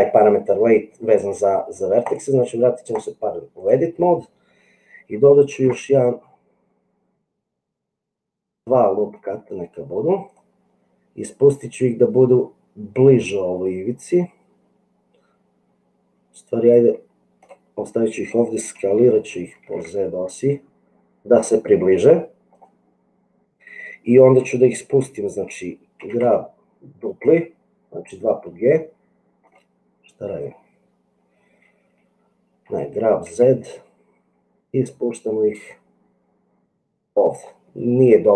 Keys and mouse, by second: 3.1 click, 5.5 ctrl+r, 19.7 s, 26.0 g, 32.6 g.